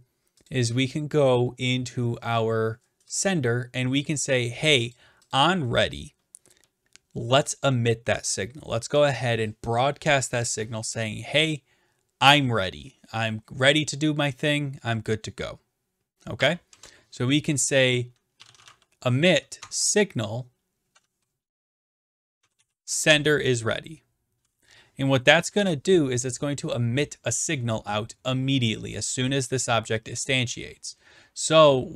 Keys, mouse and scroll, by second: 0.5-1.5 drag, 3.2-4.3 drag, 4.9-6.4 drag, 13.6 middle click, 13.7-14.8 drag, 16.7 Return, 18.1-19.1 typing, 19.6 Tab, 22.2-23.3 typing, 25.6 ctrl+s.